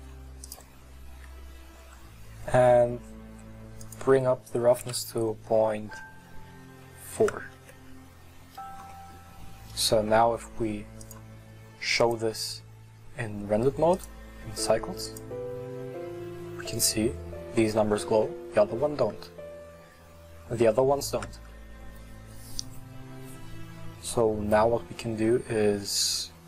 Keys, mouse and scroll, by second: 2.6-3.8 scroll up 3, 7.8 click, 14.1-15.2 drag, 17.6 middle click, 18.4-21.3 scroll down 6, 21.3-24.4 scroll down 1, 24.5-26.4 middle drag.